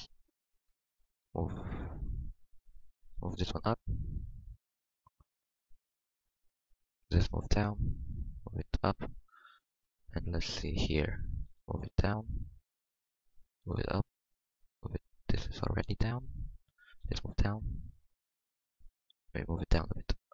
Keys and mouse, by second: 0.6 Tab, 1.2 f, 1.4 f, 3.1 g, 4.2 Tab, 6.1 Tab, 6.7 g, 8.0 g, 9.2-10.3 middle drag, 11.4 g, 13.6 g, 16.9-19.1 drag, 17.0 g, 19.1 g.